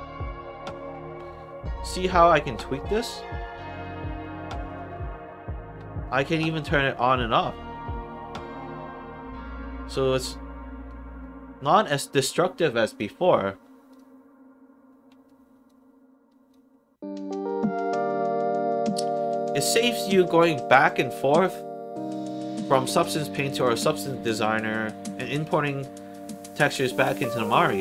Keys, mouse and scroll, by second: 4.6 click, 6.5 click, 7.4 click, 9.9 click, 12.8 click, 13.8 click, 15.2 alt+right click, 16.2 alt+right click, 16.6 alt+middle click, 17.2 alt+click, 17.8 alt+middle click, 18.4 alt+right click, 18.9 alt+middle click, 19.2 alt+right click, 19.5 alt+click.